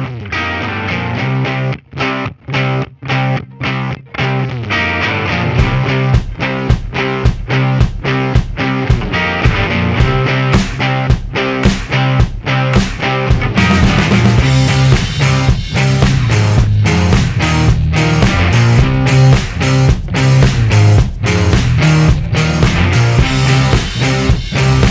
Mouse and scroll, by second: 1.7-5.1 drag, 5.6-10.8 drag, 11.5 right click, 14.4-15.7 drag, 16.5 click, 17.0 click, 18.2 click, 18.5 click, 19.9 click, 20.4 click, 21.1 click, 21.8 click, 24.5 click, 24.8 right click.